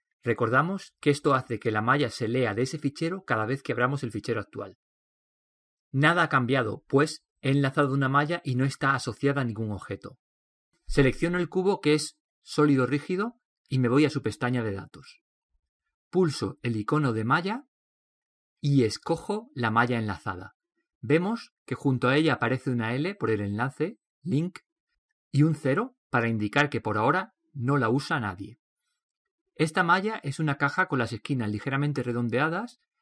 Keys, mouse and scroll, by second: 0.0-12.0 drag, 13.7-18.6 right drag, 18.6-20.6 middle drag, 20.6-21.6 right drag, 21.6 middle drag, 21.8-30.8 right drag, 31.9 click, 32.1-33.0 middle drag.